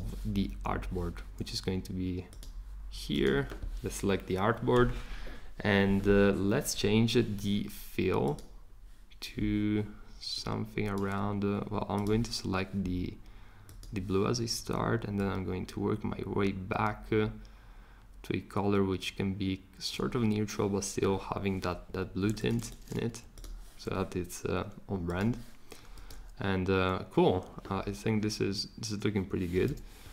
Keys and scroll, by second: 21.9 Escape.